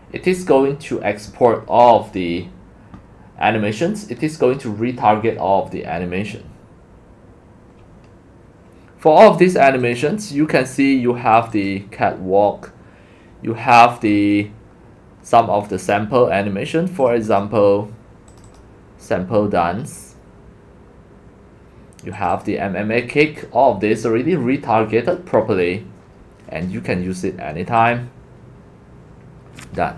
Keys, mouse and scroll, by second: 0.9 drag, 3.1-3.5 drag, 6.1 drag, 8.0 click, 9.8 click, 10.7 scroll up 1, 10.7 scroll down 2, 11.5-13.1 drag, 14.0-14.9 scroll down 6, 14.9-15.4 scroll, 17.1 click, 17.4 click, 18.4 click, 18.6 click, 19.3 scroll, 19.6 click, 20.9-21.4 drag, 22.3 click, 22.5 click, 27.8 click.